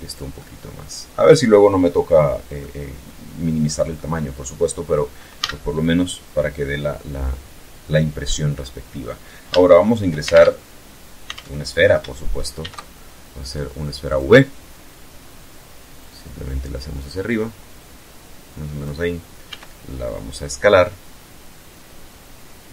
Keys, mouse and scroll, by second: 0.8 scroll up 2, 1.0-1.4 scroll down 2, 1.4 scroll up 2, 1.6-3.1 middle drag, 4.4 a, 4.7-5.0 scroll down 1, 5.0-7.4 drag, 7.6 scroll up 1, 9.4 alt+shift+Tab, 10.4 alt+Tab, 11.6 shift+a, 13.0 click, 13.7 scroll down 2, 15.0-18.0 drag, 18.4 s.